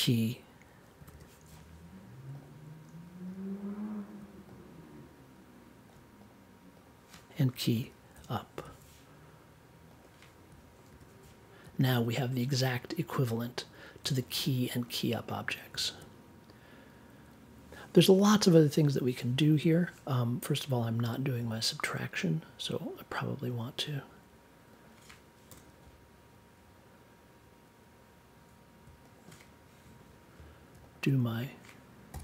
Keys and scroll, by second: 1.0 e, 7.7 u, 8.1 p, 8.5 super+j, 10.8 super+j, 25.5 BackSpace, 32.1 n.